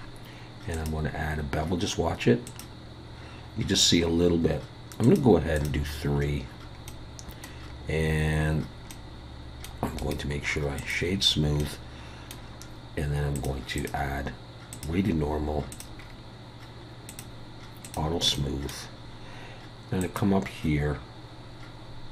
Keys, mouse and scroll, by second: 0.7 click, 5.0 click, 5.5 click, 6.9 middle click, 7.7 scroll up 2, 8.5-8.9 scroll down 1, 8.9 middle click, 9.7 scroll up 1, 10.0 right click, 11.1-11.5 scroll down 4, 11.5 scroll up 1, 11.6 middle click, 12.4 scroll down 1, 13.3 click, 13.8 click, 15.7 click, 16.0 scroll down 4, 17.1 click, 17.9 click, 18.3 middle click, 20.0 click.